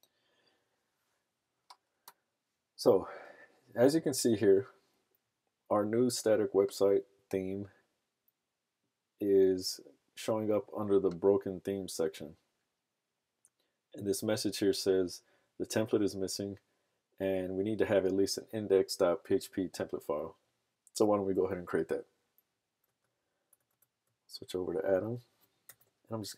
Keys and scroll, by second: 23.0 super+Tab.